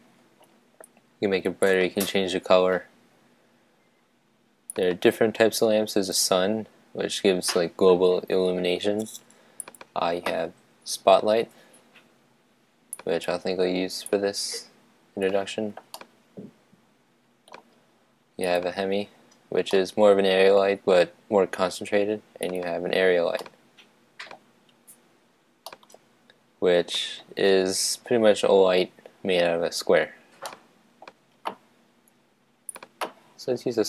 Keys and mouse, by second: 1.6-3.4 drag, 4.9-6.7 drag, 9.6-11.4 drag, 12.9-15.8 drag, 15.9-17.7 middle drag, 18.8-19.9 drag, 19.7-21.5 middle drag, 22.5-23.7 drag, 23.4-25.2 middle drag, 25.6-27.5 middle drag, 30.4-32.2 middle drag, 33.1 click.